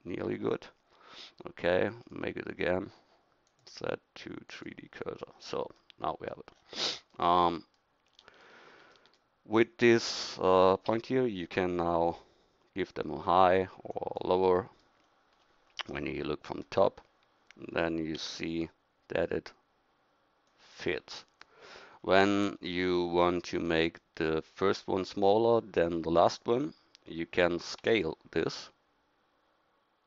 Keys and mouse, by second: 3.5 click, 10.0-11.4 right drag, 11.4 g, 16.1 KP_7, 18.2 g, 27.8 s.